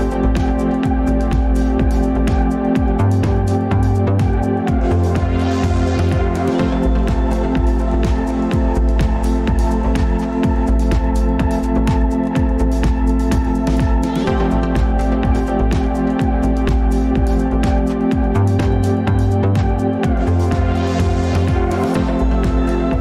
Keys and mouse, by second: 3.6 click, 9.2-11.6 drag, 12.2-12.7 middle drag, 15.6-16.0 middle drag, 16.9 ctrl+s, 17.5-18.9 middle drag, 19.8 click, 21.1 shift+click, 22.3 alt+p.